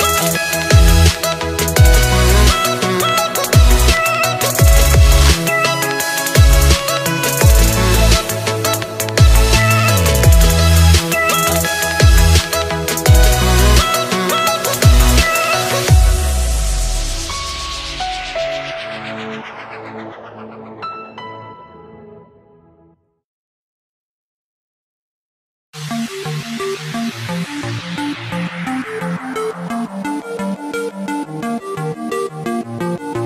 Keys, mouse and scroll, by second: 7.9-8.7 scroll down 1, 8.7 shift+middle click, 9.6-10.9 scroll down 3, 11.6-16.1 drag, 16.5-20.1 drag, 22.0 click, 23.2-23.6 scroll up 4, 24.3-27.9 drag, 30.5 click, 31.0 scroll down 1, 31.2-33.2 middle drag.